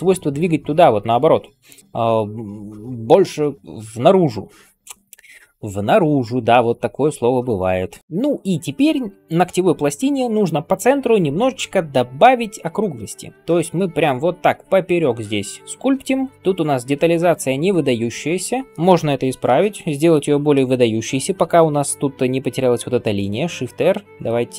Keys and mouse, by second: 0.0-5.0 typing, 16.1 [, 16.2 [, 23.5 shift+r.